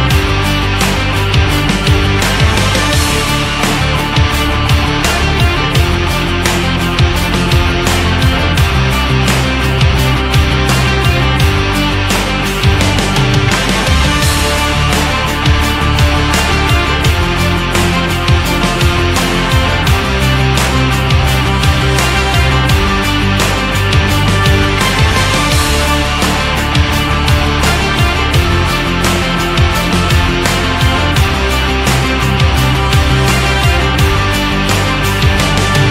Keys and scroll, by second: 2.3 ctrl+z, 17.7 ctrl+z, 23.0 ctrl+z.